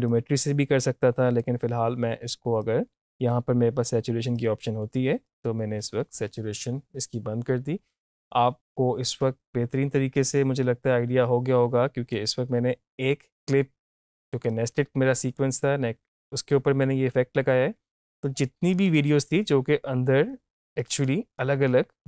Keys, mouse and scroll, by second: 0.1-8.5 drag, 14.5-17.6 drag, 18.7 click.